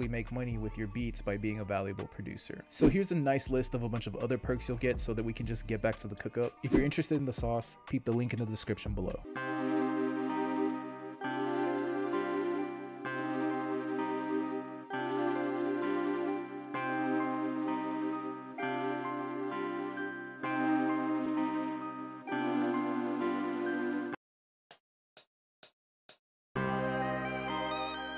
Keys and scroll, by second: 9.3 space, 13.8 alt+shift+Right, 24.7 space.